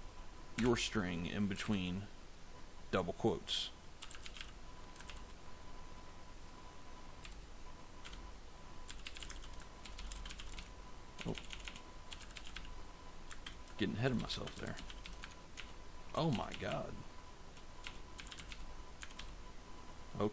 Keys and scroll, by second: 0.4 BackSpace, 1.5 shift+', 3.6-5.0 typing, 7.1 Down, 7.9 Return, 8.5-15.5 typing, 17.8-19.1 typing.